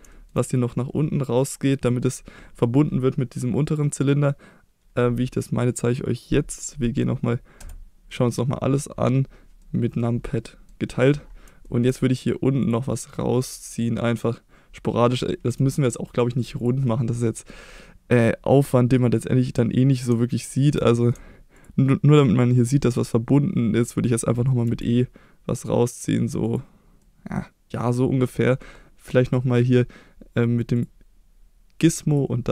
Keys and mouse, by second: 0.2 shift+middle click, 0.4 middle click, 7.6 KP_Divide, 9.6 middle click, 10.4 middle click, 10.9 middle click, 11.6 shift+middle click, 12.6 click, 13.1-14.2 middle drag, 15.5 f, 16.6 click, 16.9-19.5 middle drag, 20.7 middle click, 21.5 ctrl+click, 23.0-24.2 middle drag, 24.6 e, 26.4 click, 27.0 middle click, 28.4 middle click, 30.8 click, 32.2-32.5 drag.